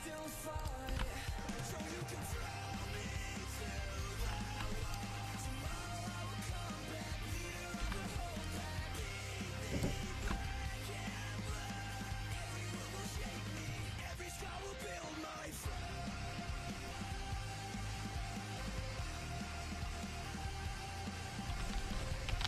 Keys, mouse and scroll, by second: 1.0 g, 1.8 a, 2.3-4.1 drag, 2.3 right click, 3.3 l, 4.3 h, 6.7-7.9 right drag, 7.9 g, 8.8 a, 10.3 g, 11.3 a, 17.4 middle click, 21.7 KP_5, 21.8 KP_1, 22.4 KP_5.